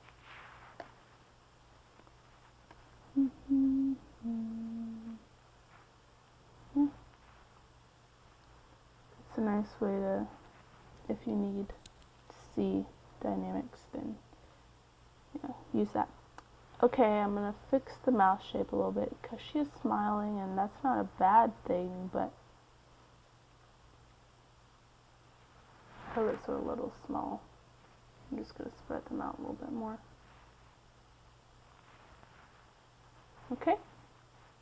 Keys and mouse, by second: 4.4-6.7 middle drag, 7.2-9.3 drag, 10.1-11.1 drag, 11.9-13.2 middle drag, 15.4-18.0 middle drag, 18.0 KP_1, 21.1 g, 21.4 f, 25.1-27.8 drag, 28.0 ctrl+z, 29.1-31.5 drag, 32.9-34.6 drag.